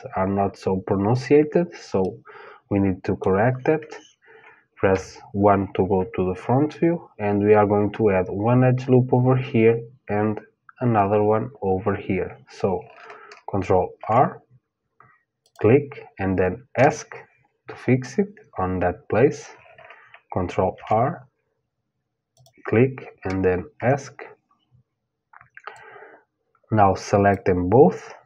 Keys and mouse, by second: 1.6-4.5 middle drag, 4.5 KP_1, 13.5 ctrl+r, 20.3 ctrl+r, 25.3-27.4 drag.